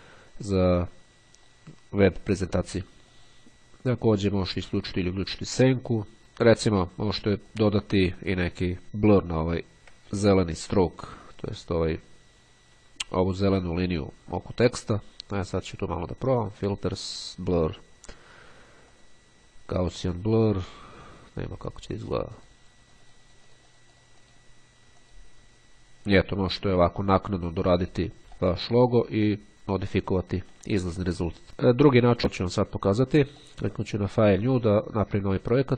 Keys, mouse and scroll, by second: 2.6 click, 4.1 click, 6.2 click, 7.6 click, 9.6-10.2 ctrl+scroll up 2, 11.4 click, 13.9 click, 16.6 click, 18.6 click, 21.2 click, 22.5-24.9 drag, 25.0 click, 28.5 middle click, 29.5 click, 30.3 middle click, 32.2-34.2 drag, 34.3 click.